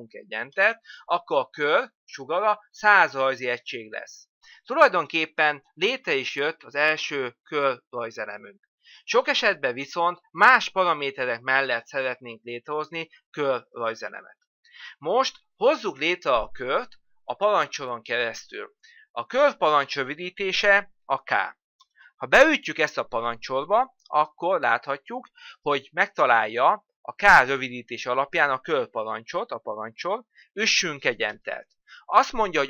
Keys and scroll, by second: 20.7 k, 30.6 Return.